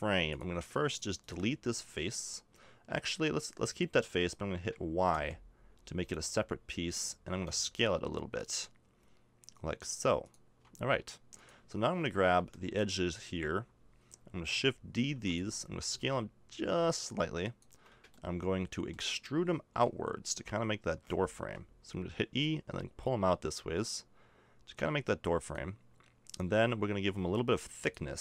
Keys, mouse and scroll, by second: 0.3 click, 1.2-2.3 right drag, 2.3 middle click, 5.1 y, 7.3 s, 15.0 shift+d, 15.8 s, 18.2 middle click, 19.7 e, 22.4-24.3 drag, 27.8 click.